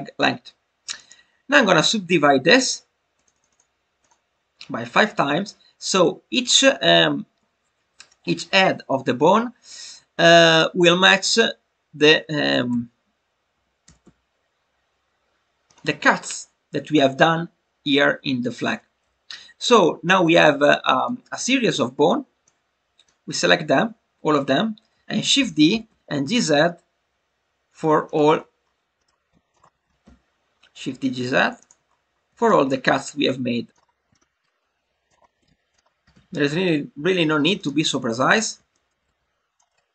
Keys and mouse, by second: 1.0-3.1 right drag, 3.1 click, 3.3 click, 3.5 click, 4.0-7.4 drag, 7.4 shift+middle click, 10.4 click, 20.2 click, 22.4 click, 23.7 click, 28.0 click, 29.0 shift+middle click, 31.5 click, 32.4 shift+middle click, 33.7 shift+d, 33.7 g, 33.7 z, 34.1 shift+middle click, 35.7 click, 38.6 shift+middle click.